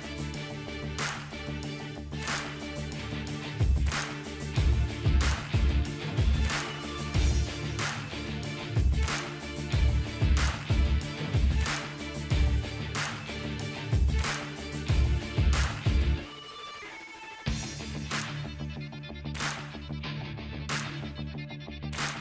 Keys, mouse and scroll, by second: 2.8 click, 3.0-3.4 drag, 3.0 typing, 18.0-18.6 drag, 18.0 typing.